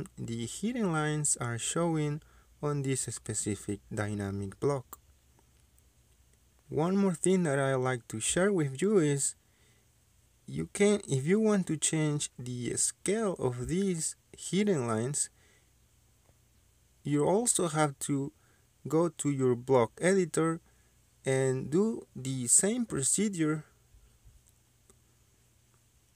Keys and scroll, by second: 4.5 Escape, 7.8 Escape, 18.9 Escape.